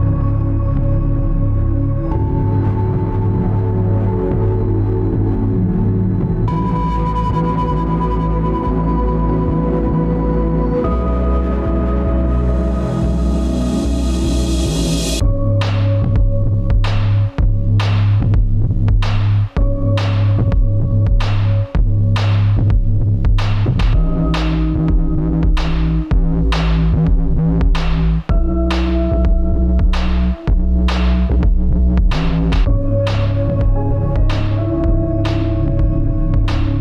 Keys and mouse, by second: 2.3 ctrl+r, 5.7 ctrl+z, 6.4 ctrl+r, 17.9 `, 19.0-19.5 middle drag, 19.8-20.4 middle drag, 21.5-22.2 middle drag, 24.3-25.8 middle drag, 26.7-27.1 middle drag, 32.9-34.1 middle drag, 35.8 click.